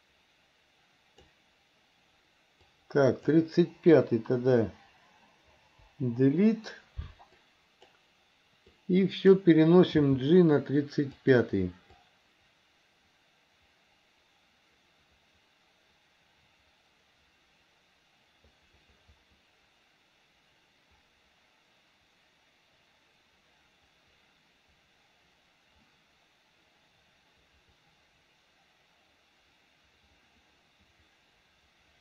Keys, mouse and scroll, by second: 2.6 click, 5.9 Delete, 7.5 click, 8.8 click, 10.1 g, 12.0-32.0 drag.